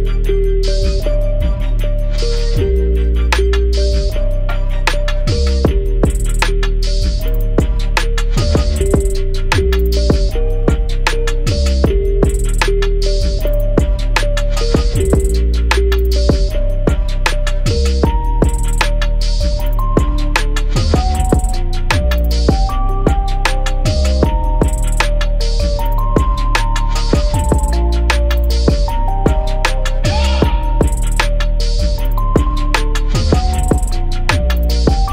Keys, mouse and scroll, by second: 2.5-3.2 scroll down 1, 3.5-5.0 drag, 8.5 ctrl+s, 8.6 z, 9.5 ctrl+z, 9.9 click, 15.2-16.4 scroll up 1, 16.4 scroll down 1, 16.5 z, 17.6-19.1 alt+drag, 19.3-19.8 scroll up 1, 19.8 click, 22.7 shift+click, 23.8 alt+shift+click, 25.5 scroll down 1, 25.8-30.1 drag, 33.1 scroll down 1, 33.4 scroll up 1, 33.9-35.1 drag.